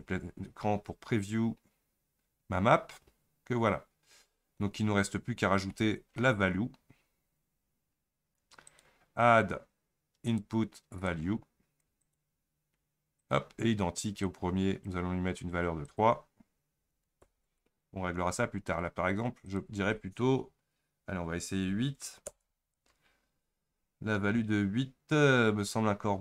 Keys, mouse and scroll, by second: 3.4-3.7 scroll up 4, 3.9-4.3 scroll down 4, 14.3-22.5 drag, 25.3 scroll up 4, 25.7 scroll down 3.